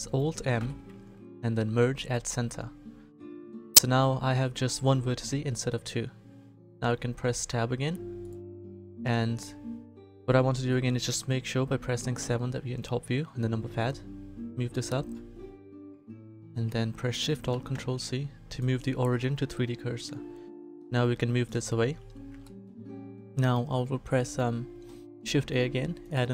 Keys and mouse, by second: 0.5 alt+m, 6.7 Tab, 7.2 a, 8.2-10.1 middle drag, 10.1 click, 12.2 KP_7, 17.5 ctrl+alt+shift+c, 21.6 middle click, 23.3 shift+a.